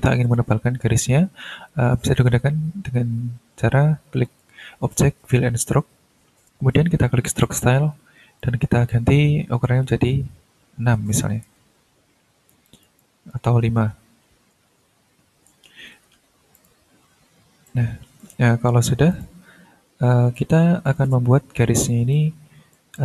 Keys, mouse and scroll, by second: 4.2 click, 5.6 click, 7.2 click, 8.4 click, 10.8 6, 11.5 Return, 12.6-13.5 drag, 13.7 5, 14.5 BackSpace, 15.6 5, 15.9 Return, 16.5 click, 17.2 ctrl+scroll up 2, 17.6 ctrl+click, 19.1 click, 19.5 scroll down 2, 20.3 ctrl+click, 21.1 ctrl+scroll up 1, 22.1 ctrl+click.